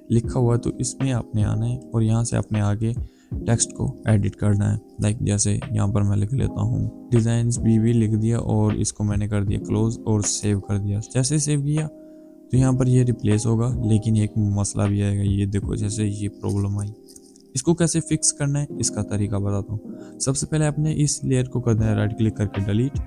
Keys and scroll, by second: 4.9 ctrl+a.